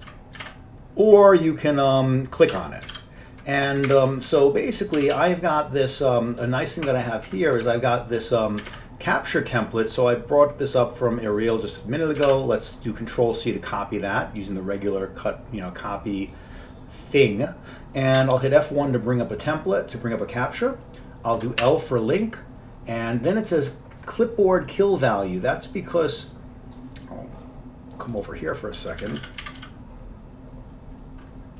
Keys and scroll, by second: 0.1 ctrl+w, 0.5 alt+Tab, 2.6 Home, 3.0 ctrl+k, 4.0 Up, 4.1 Right, 4.4 ctrl+k, 5.1 ctrl+x, 5.2 ctrl+s, 7.7 Down, 8.8 Tab, 12.4 ctrl+c, 18.4 F1, 21.7 l, 29.0-30.2 typing.